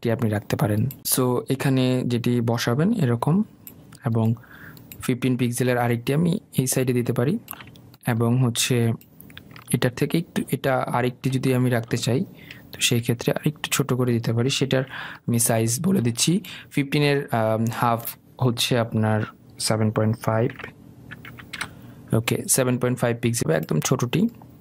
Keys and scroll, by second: 15.4 Delete, 22.2 Return.